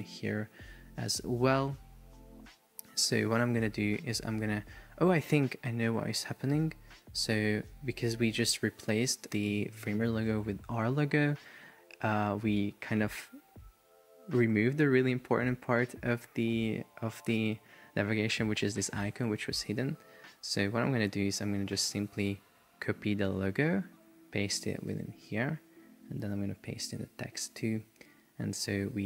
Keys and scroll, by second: 5.9 super+z, 10.9 super+z, 20.9 super+z, 23.3 super+c, 25.0 shift+super+v, 26.4 super+c, 27.6 super+v.